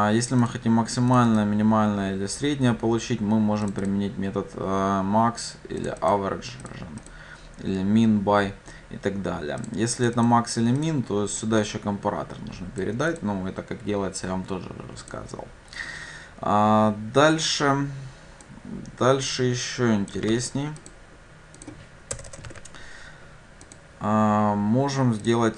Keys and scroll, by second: 20.3 ctrl+c, 23.8 ctrl+v.